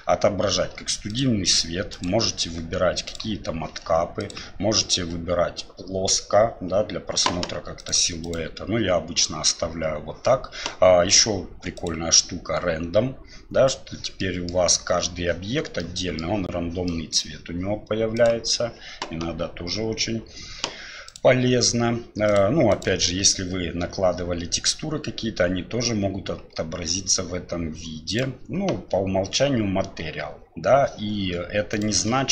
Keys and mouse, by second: 14.3 middle drag, 15.8-16.2 middle drag, 16.9 middle drag, 18.1-30.9 drag.